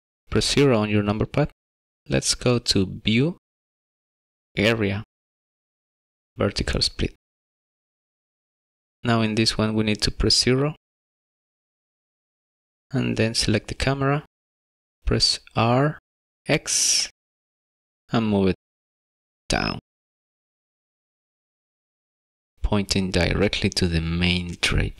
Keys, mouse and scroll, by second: 0.2 shift+middle click, 0.9 KP_0, 3.2 click, 8.4 click, 9.9 KP_0, 11.1 middle click, 12.7 click, 13.3 shift+middle click, 15.3 r, 23.9 click.